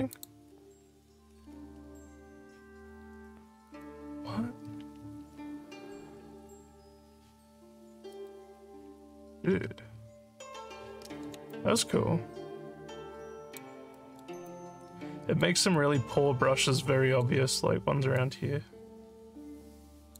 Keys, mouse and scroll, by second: 0.1 click, 3.7 click, 8.1 click, 11.5-13.6 alt+drag, 13.9 alt+middle click, 14.5 alt+click, 15.7-17.2 alt+drag, 18.2-20.1 alt+drag.